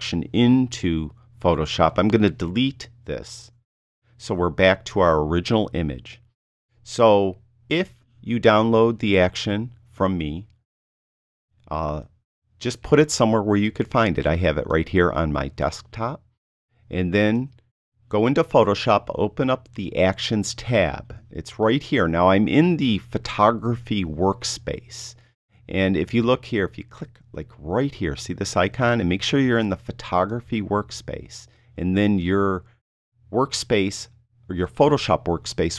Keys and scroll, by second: 3.4 BackSpace.